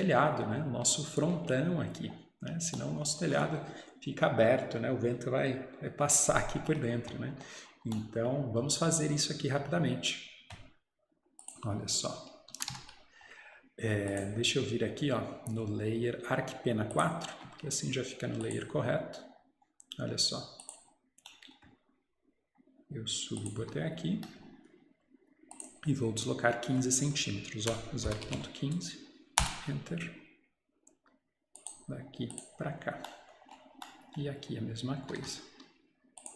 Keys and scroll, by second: 12.6 Escape, 12.7 Escape, 23.7 Escape, 27.7-29.2 typing, 29.4 Return, 35.1 Escape, 35.2 Escape.